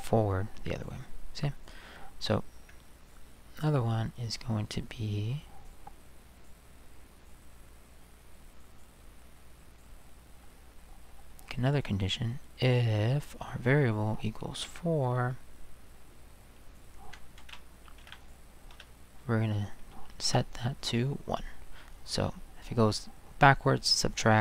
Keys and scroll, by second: 14.6 4, 17.4 ctrl+c, 18.0 ctrl+v, 18.7 space, 20.2 1.